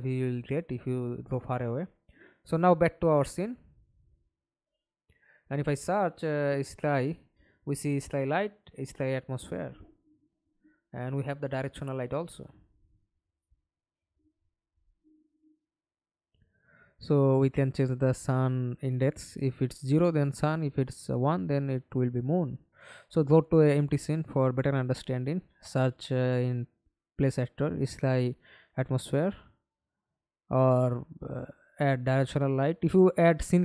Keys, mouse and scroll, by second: 2.0 middle click, 4.4-5.1 typing, 9.1-10.1 typing, 19.2 BackSpace, 22.0 double click, 24.3-25.2 typing, 28.2 Delete, 30.5-31.4 typing.